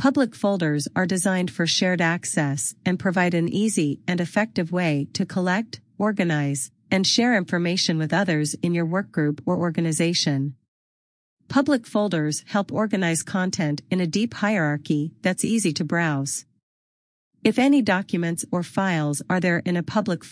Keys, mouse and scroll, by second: 16.4-16.7 scroll down 1.